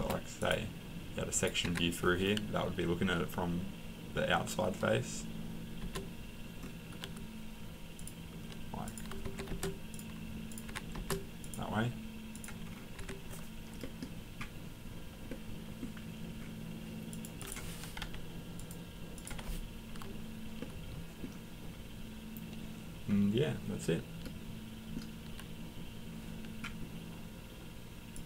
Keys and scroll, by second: 1.6 Escape, 9.2 Escape, 10.7 Escape, 13.0 Escape, 18.0 Delete, 19.3 Delete.